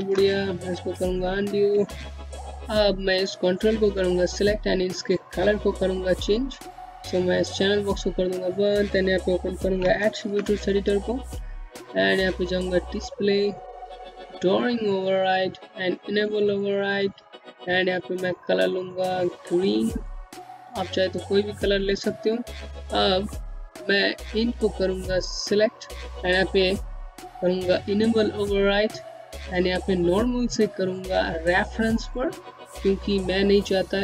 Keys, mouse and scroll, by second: 0.5 ctrl+z, 1.1 click, 1.5-2.2 scroll down 1, 2.2-2.6 scroll up 1, 2.6 click, 6.1 click, 8.2 a, 10.7 click, 11.4-12.6 scroll down 1, 12.6 click, 13.0-14.1 scroll down 1, 14.1 click, 14.1 scroll down 1, 15.6 click, 22.4 scroll up 1, 22.9 click, 26.6 click.